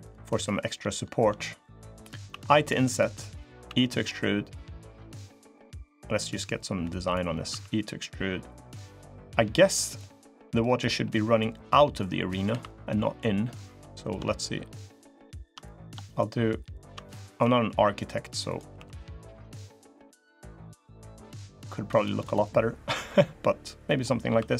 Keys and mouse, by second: 3.6 e, 7.3 e, 10.0 middle click, 11.7 middle click, 12.2 3, 13.4 click, 14.6 shift+click, 15.4 middle click, 15.6 click, 16.8 click, 17.0 middle click, 17.2 e, 18.6 s, 20.1-22.0 drag, 22.2 middle click, 22.8 middle click, 23.6 middle click, 24.4 3.